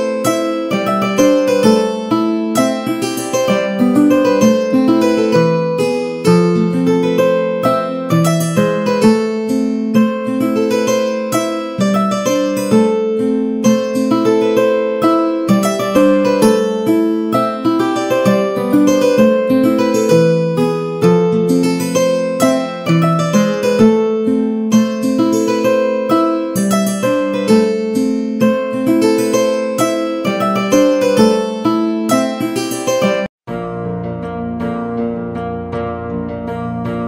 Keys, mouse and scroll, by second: 0.0 click, 0.0 g, 0.6 middle click, 1.7 shift+d, 4.3-6.4 middle drag, 7.1 shift+click, 7.9 middle click, 8.6 g, 9.8 middle click, 10.5 a, 10.6 a, 10.7 middle click, 13.2 shift+middle click, 14.0 shift+middle click, 14.7 Tab, 15.4 z, 20.3 1, 20.7 click, 21.3 z, 22.0 shift+middle click, 22.4 middle click, 24.1 g, 26.0 z, 26.9 middle click, 27.7 click, 28.0 z, 30.0 g, 33.0 Tab, 33.0 middle click, 34.3 click, 34.8 Tab, 36.0 z.